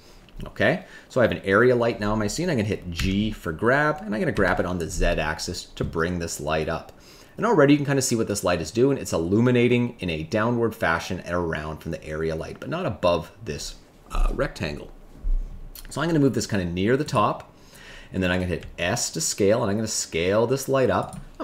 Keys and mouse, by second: 2.9 g, 4.3 z, 17.0 click, 18.6 s.